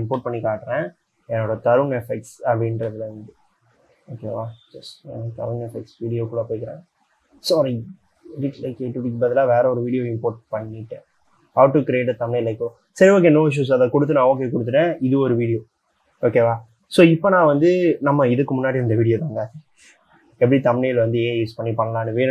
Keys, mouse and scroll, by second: 1.0-1.8 scroll up 3, 1.8-2.5 scroll up 4, 2.5-3.1 scroll up 2, 3.5-5.5 scroll up 3, 6.8 double click.